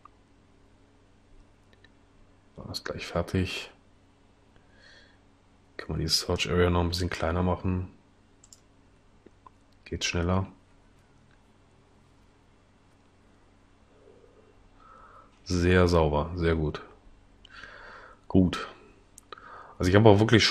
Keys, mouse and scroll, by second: 5.8 Escape.